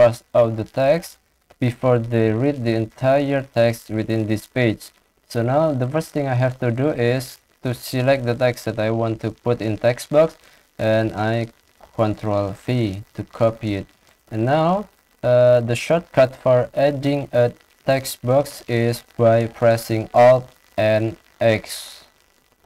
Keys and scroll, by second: 0.1 ctrl+shift+Down, 0.4 ctrl+shift+Left, 2.1 ctrl+c, 7.7 ctrl+shift+Down, 8.0 shift+Left, 8.6 shift+Left, 11.4 ctrl+c, 20.5 alt+n, 21.0 x.